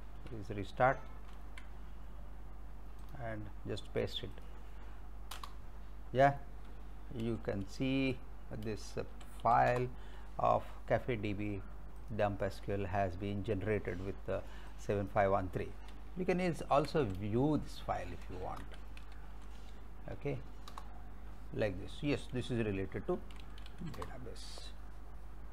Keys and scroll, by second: 1.3 ctrl+c, 5.3 Return, 7.2 l, 7.5 s, 8.7 space, 9.1 -, 9.5 l, 9.7 Return, 16.4-18.5 typing, 19.0 Tab, 20.7 Return, 23.0-24.2 typing.